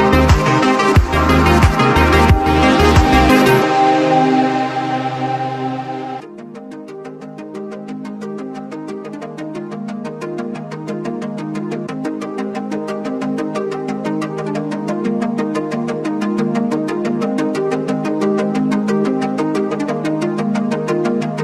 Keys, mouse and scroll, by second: 0.1 click, 0.9 alt+scroll down 1, 1.9-3.1 drag, 3.4 alt+scroll up 1, 3.7 click, 6.8 click, 8.7 click, 10.1 click, 12.7 alt+scroll down 1, 13.0 click, 13.3-14.3 scroll up 1, 14.8-16.4 drag, 16.4 click, 17.1 alt+scroll down 1, 17.4-21.4 drag.